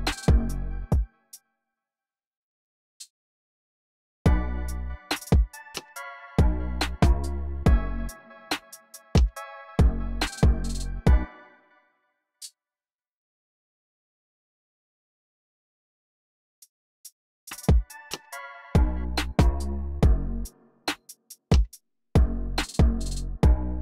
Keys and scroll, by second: 0.6 space, 2.2 BackSpace, 3.1 super+r, 4.0 space, 11.0 space, 13.1 |, 13.3 BackSpace, 13.6 super+a, 16.0-17.4 typing, 21.7 e.